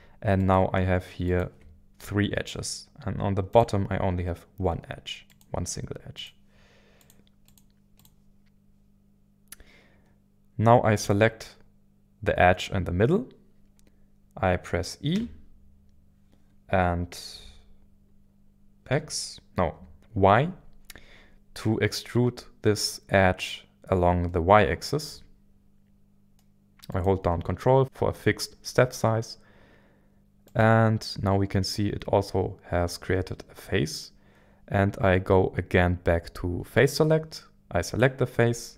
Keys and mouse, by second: 0.3 shift+click, 1.3 shift+click, 3.5 click, 6.2 click, 7.9 click, 15.1 e, 18.2 e, 18.8 x, 19.7 x, 21.9 y, 26.9 ctrl+click, 30.4-38.7 drag.